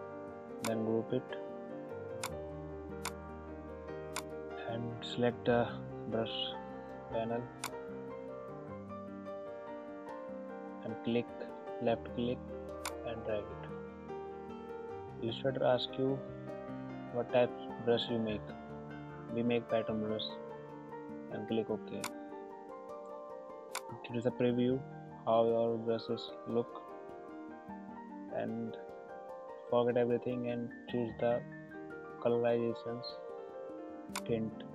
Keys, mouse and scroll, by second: 2.9 right click, 4.1 click, 7.6 click, 12.8-21.9 drag, 34.1 click.